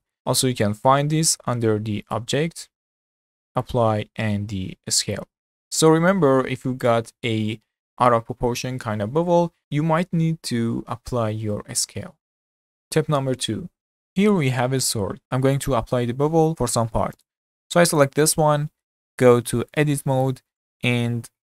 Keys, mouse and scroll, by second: 2.1-5.2 drag, 14.8-15.2 scroll up 2, 17.2 click, 18.0 click, 18.5-19.1 scroll up 4, 19.1-19.8 shift+middle drag, 19.8 Tab, 20.3-21.4 middle drag, 21.4 2.